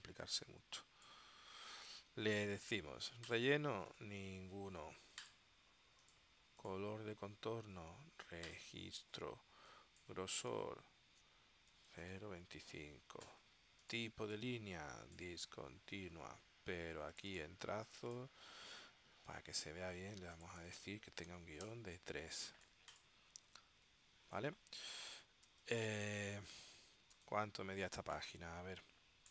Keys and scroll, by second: 10.7-12.7 typing, 21.5 3, 21.8 Return, 25.6 space, 27.3 space.